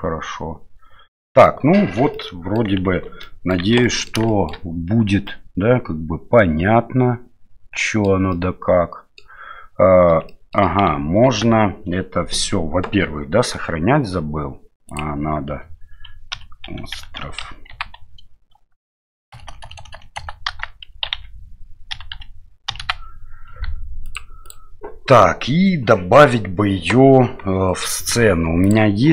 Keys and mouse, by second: 2.1-2.6 middle drag, 2.9 shift+z, 3.2 middle drag, 3.6 shift+z, 3.8 middle drag, 4.3 shift+middle drag, 5.3-8.1 middle drag, 8.3-9.2 middle drag, 10.3-10.6 shift+middle drag, 11.3 ctrl+s.